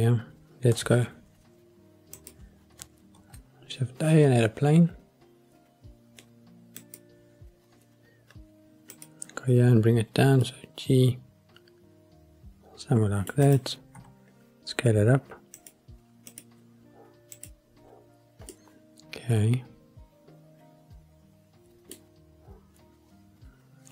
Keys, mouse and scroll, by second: 2.1 click, 3.1 shift+a, 8.9 click, 10.2 g, 10.4 middle click, 13.4 click, 13.9 s, 15.5 click, 16.3 click, 17.3 click, 18.5-21.9 middle drag.